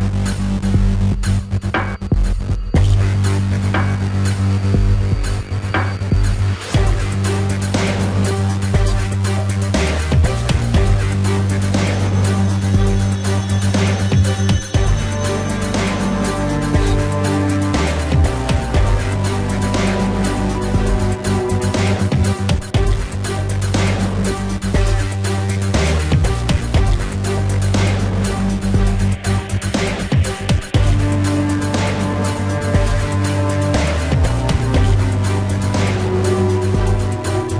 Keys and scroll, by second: 0.5 space, 1.3 space, 1.7 space, 3.2 space, 5.3 ctrl+=, 6.0 space, 6.2 ], 6.5 ], 8.0-11.1 typing, 12.3 ], 12.7 space, 13.7 ], 14.4 ], 15.0 ], 22.2-26.5 typing, 22.6 ctrl+=, 22.9 ctrl+=, 23.2 ctrl+=, 27.8 ctrl+alt+z, 28.0 ctrl+alt+z, 31.6 space, 36.4 ctrl+-, 36.8 ctrl+-, 36.9-37.5 typing, 37.0 ctrl+-.